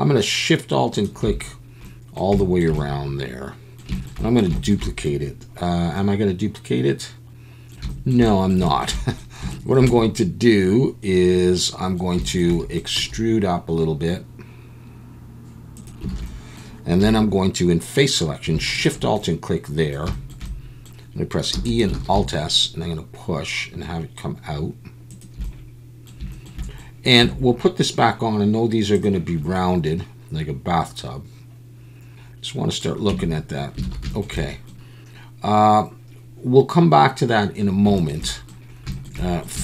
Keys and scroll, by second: 13.0 e, 16.1 alt+a, 17.0 3, 21.5 e, 21.9 alt+s, 27.2 Tab, 33.1 Tab, 33.8 alt+a.